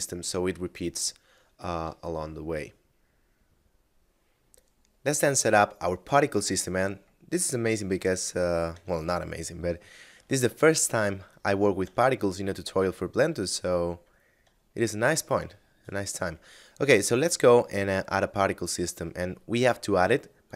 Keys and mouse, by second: 2.1 shift+middle click.